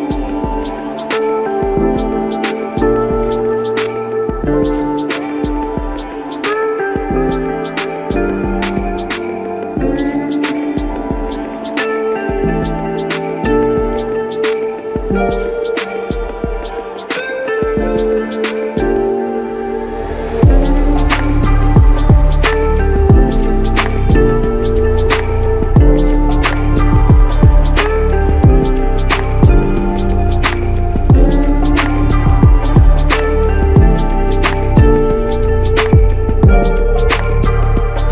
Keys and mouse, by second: 1.9 ctrl+click, 3.7 ctrl+click, 7.6 typing, 10.0 alt+click, 12.1 alt+click, 13.5 alt+click, 18.8 ctrl+click, 19.2 ctrl+double click, 20.7 typing, 23.1 shift+click, 25.0 shift+click, 29.1 shift+click, 30.9 shift+click, 32.5 alt+click, 36.6-37.9 typing.